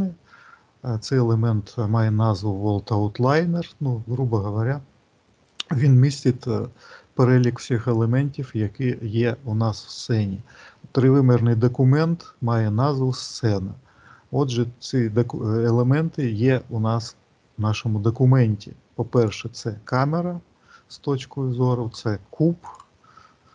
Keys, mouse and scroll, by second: 9.0 middle click, 10.5 middle click, 11.4 middle click, 19.0 click, 22.5 click.